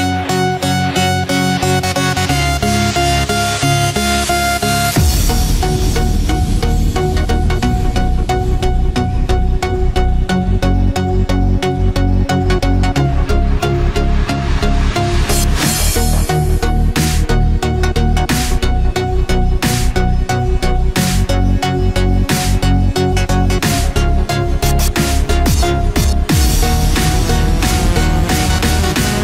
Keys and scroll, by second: 4.3 ctrl+0, 4.9 ctrl+=, 19.1 ctrl+=.